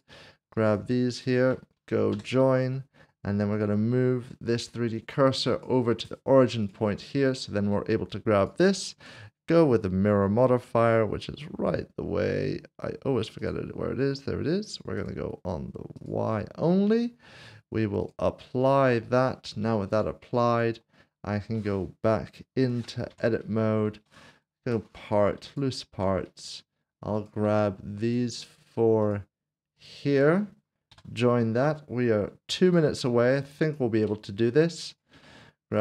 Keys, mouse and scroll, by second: 0.6 shift+click, 2.3 ctrl+j, 3.5 right click, 5.5 click, 13.4 click, 23.1 Tab, 24.6 p, 25.9 Tab, 28.0 shift+click, 29.0 shift+click, 30.9 ctrl+j, 33.6 shift+click, 34.9 shift+click, 35.1 s, 35.7 shift+click.